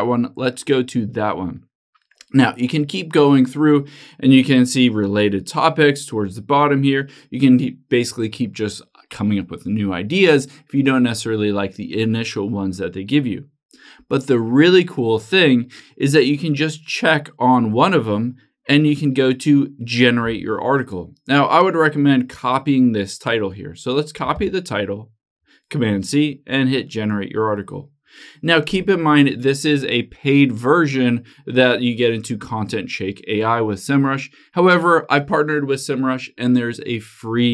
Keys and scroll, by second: 24.6 super+c.